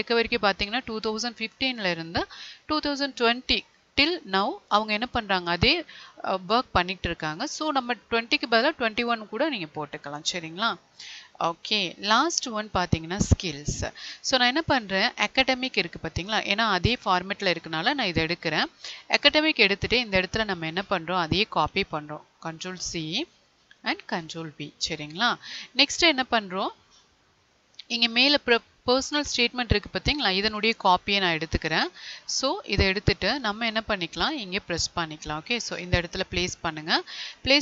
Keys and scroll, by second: 22.2 ctrl+c, 24.1 ctrl+v.